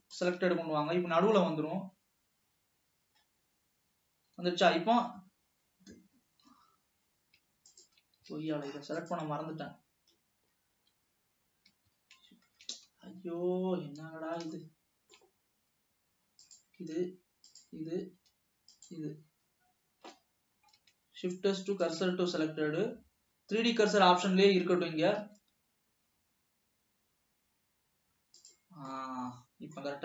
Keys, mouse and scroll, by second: 5.3 s, 7.9-9.8 shift+drag, 12.0 click, 12.3 shift+s, 13.6 Escape, 13.8 Escape, 14.8-16.6 middle drag, 16.6-17.0 drag, 18.1 shift+click, 18.8 shift+click, 21.5 shift+s, 25.5 s, 29.0-30.0 middle drag.